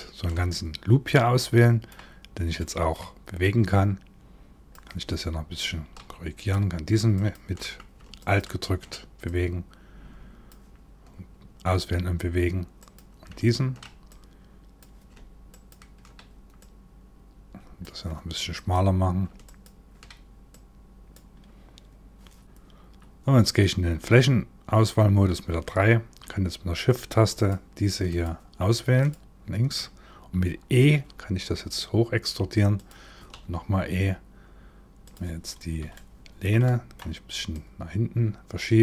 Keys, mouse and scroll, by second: 0.1 middle click, 2.2 middle click, 3.0 click, 6.0 click, 6.7 alt+click, 6.9 alt+click, 7.8 click, 8.8 click, 12.4 click, 13.7 click, 15.1 alt+click, 15.3 alt+click, 16.2 click, 18.2 click, 19.1 alt+click, 20.1 click, 23.5 3, 26.9 shift+click, 27.7 shift+click, 28.6 shift+click, 30.4 e, 32.9 e, 35.2 scroll down 1, 35.5 shift+middle click, 36.2 middle click, 37.1 click.